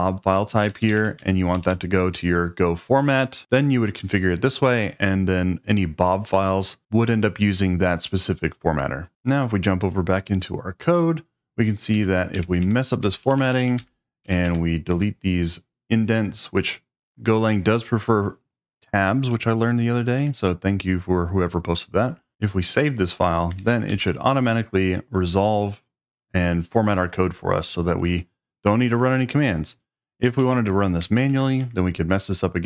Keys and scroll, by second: 0.0-2.1 typing, 11.7-14.4 typing, 14.9 Escape, 20.2 Escape, 22.3 shift+;, 23.6 shift+;, 23.9 w, 24.0 Return, 30.4 shift+v, 31.1 shift+,, 31.6 Escape.